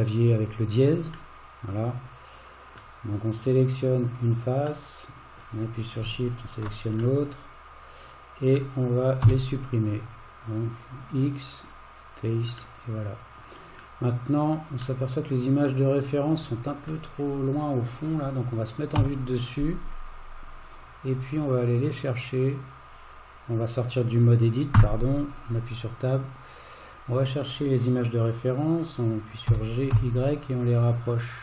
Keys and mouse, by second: 1.4-2.8 middle drag, 3.4 click, 4.9 middle click, 7.2-8.6 middle drag, 9.2 x, 12.8 middle click, 15.0-16.9 middle drag, 19.0 KP_7, 24.8 Tab, 26.2-27.0 drag, 29.5 g.